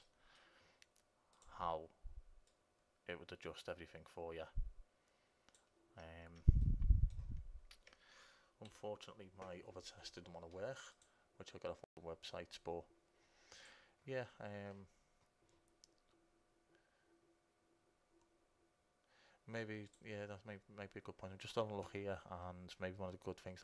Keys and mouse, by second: 0.8 middle click, 1.7-4.7 drag, 6.9 click, 7.6 middle click, 8.0 click, 8.9 Delete.